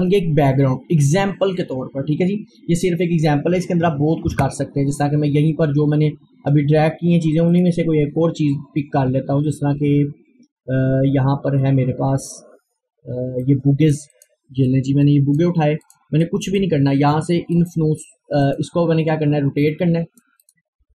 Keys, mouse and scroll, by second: 0.6-1.3 scroll up 1, 3.9 super+Num_Lock, 3.9-4.3 scroll up 1, 4.3 super+e, 5.9-6.2 scroll down 1, 7.6 click, 8.3 scroll down 1, 13.4-17.0 drag, 17.0 scroll up 1, 17.6-20.9 drag.